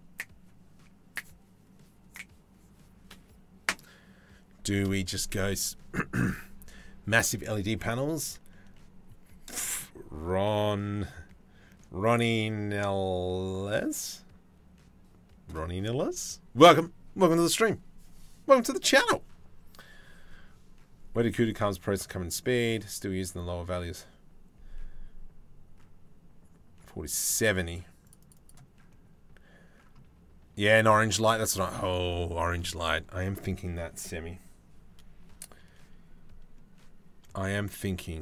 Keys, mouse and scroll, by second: 30.8 middle click.